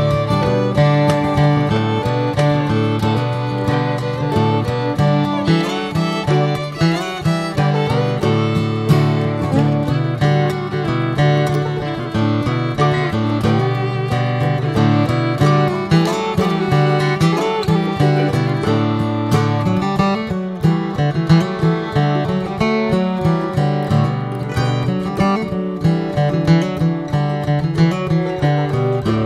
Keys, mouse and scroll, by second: 1.6 Tab, 1.8 drag, 2.2 drag, 2.7-3.2 shift+middle drag, 3.2 ctrl+a, 3.8 Tab, 4.2 Tab, 5.5 ctrl+r, 6.6 alt+z, 7.2 s, 14.3 middle click, 14.8 Tab, 15.0 drag, 15.3 click, 15.6 ctrl+a, 16.2 click, 16.4 scroll down 3, 16.7-17.4 middle drag, 17.4 scroll up 1, 17.6 click, 18.1 ctrl+a, 18.6 click, 19.1-20.6 middle drag, 20.9 click, 21.2 middle click, 21.5 scroll up 1, 21.7 ctrl+s, 21.9 click, 22.5-22.9 middle drag, 23.7 ctrl+s, 24.1-24.7 middle drag, 24.7 Tab, 24.9 middle click, 25.5 Tab, 25.7 drag, 26.2 alt+middle click, 26.5 alt+middle click, 27.1 click, 27.9 click, 28.2 shift+a.